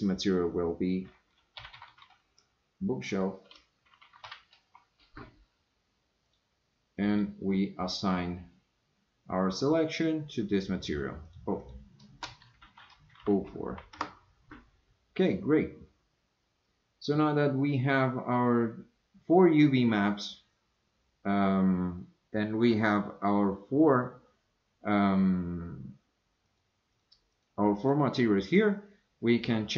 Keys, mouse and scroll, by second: 1.9 o, 7.1 click, 11.3-14.6 drag, 15.2 click, 26.5 click, 26.9 click, 27.3 click, 27.8 click.